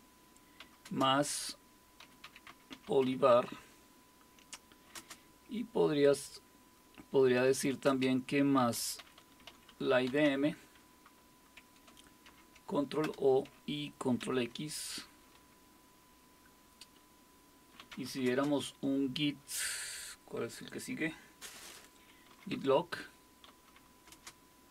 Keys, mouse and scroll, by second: 0.0-3.8 typing, 4.9 typing, 7.4-10.7 typing, 12.3 ctrl+o, 13.0 Return, 14.2 ctrl+x, 17.6-18.5 typing, 22.0-24.1 typing.